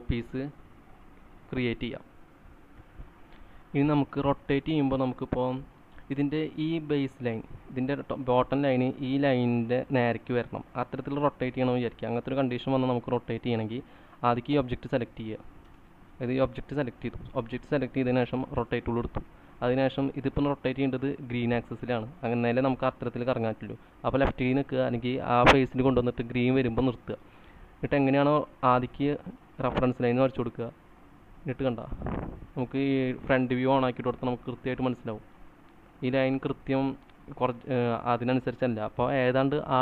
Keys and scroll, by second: 2.5-3.5 typing, 15.8 space, 24.3 Left.